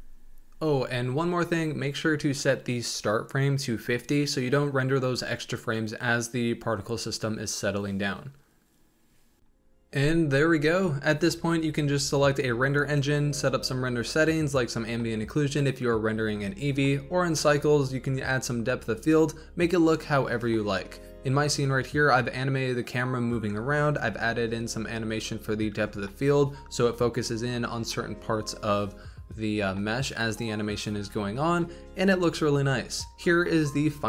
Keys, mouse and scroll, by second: 4.9 middle click, 5.0-6.6 drag, 6.6 scroll down 3, 6.8-8.1 middle drag, 8.1 scroll up 1, 8.4-8.8 middle drag, 8.8 scroll up 1, 9.6 scroll down 1, 9.7 scroll up 4, 9.8 shift+middle click, 10.1 ctrl+alt+KP_0, 10.2 scroll down 1, 10.4 g, 10.5 scroll up 1, 10.6 r, 11.0 g, 11.3 shift+right drag, 11.5-12.0 shift+right drag, 12.0-13.5 typing, 12.7 click, 12.9 click, 14.2 click, 14.5 click, 14.8-15.3 scroll down 4, 14.8 middle click, 15.5 click, 15.8 shift+middle click, 16.0 click, 16.5 KP_0, 16.6 scroll up 3, 16.8 shift+click, 18.2 click, 18.7 r, 19.1 click, 19.4 r, 19.5 z, 19.6 r, 20.5 click, 20.8 t, 21.2 drag, 21.4 middle click, 21.6 space, 22.4 space, 22.6 click, 22.8 Left, 23.0 Right, 23.0 Right, 23.3 Left, 23.5-25.6 typing, 23.7 Right, 27.6 click, 27.9 r, 28.2 drag, 28.4 r, 28.7 g, 28.9 g, 29.6 click, 31.2 Right, 31.3 Right, 31.5-33.0 typing, 33.8 click.